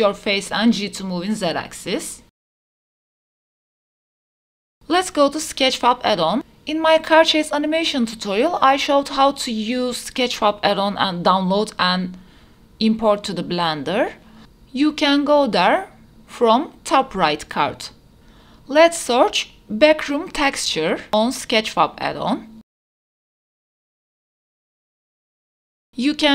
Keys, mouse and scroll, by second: 0.5 click, 0.6 middle click, 1.1 Tab, 1.5 3, 1.7 click, 1.9 g, 2.8 Tab, 2.9 middle drag, 3.3 scroll up 2, 3.5 shift+middle drag, 3.9 middle click, 4.2 n, 6.1 click, 11.1-21.4 drag, 19.5 o, 22.7-24.7 drag, 26.1 click.